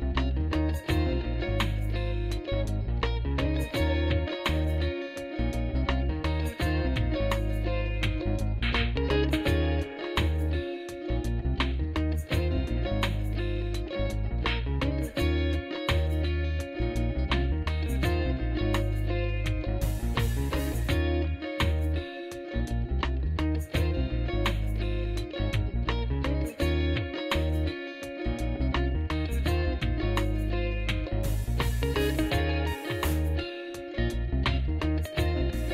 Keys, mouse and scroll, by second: 1.6 shift+s, 8.5 click, 9.3 shift+s, 15.4 shift+s, 16.3 shift+s, 17.8 shift+s, 18.9 shift+s, 20.7 shift+s, 21.8 shift+s, 22.8 shift+s, 24.2 shift+s, 25.0 shift+s, 26.0 shift+s, 30.0 shift+s, 31.2 shift+s, 32.3 shift+s, 33.5 shift+s, 34.8 shift+s.